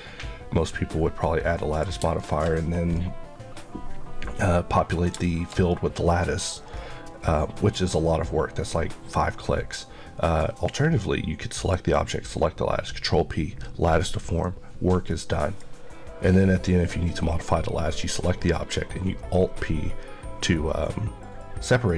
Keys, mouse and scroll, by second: 2.4-2.8 scroll up 1, 2.8 middle click.